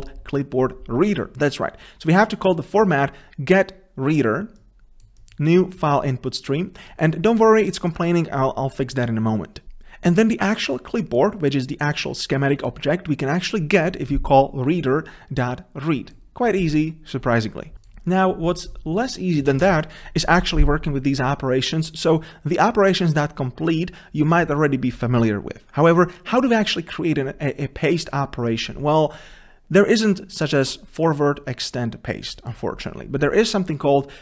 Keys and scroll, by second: 9.7 ctrl+v.